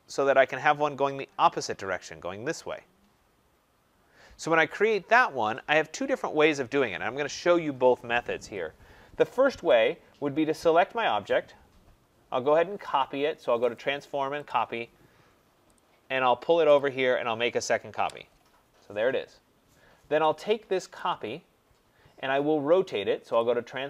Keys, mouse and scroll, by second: 10.5 click, 13.7 click, 14.5 click, 15.0 middle click, 15.1 middle click, 15.8 click, 16.7 click, 17.9 Return, 20.9 click, 23.3 click.